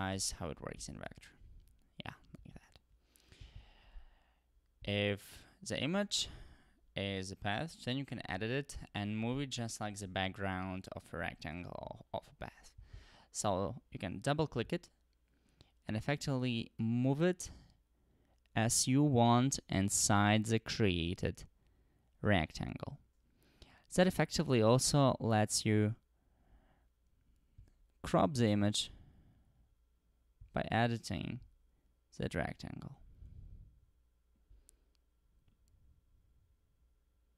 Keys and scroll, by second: 0.1-1.3 typing.